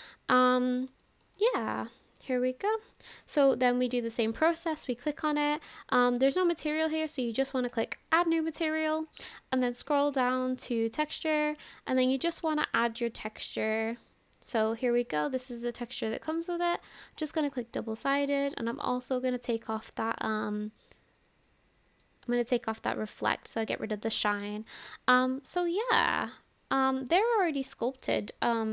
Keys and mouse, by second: 1.1 shift+middle click, 1.7 middle click, 2.1 click, 4.6 click, 7.7 click, 11.1 click, 16.5 click, 20.0-22.1 drag, 25.2-26.6 middle drag, 26.6-27.7 drag.